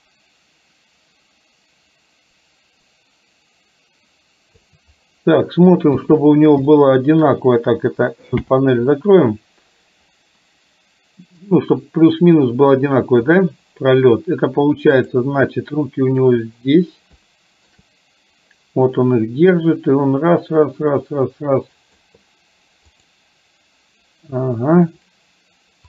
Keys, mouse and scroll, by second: 6.0 KP_3, 6.8-7.3 shift+middle drag, 8.4 n, 11.6-13.4 drag, 15.1 click, 17.3 shift+middle click, 19.6-22.3 drag.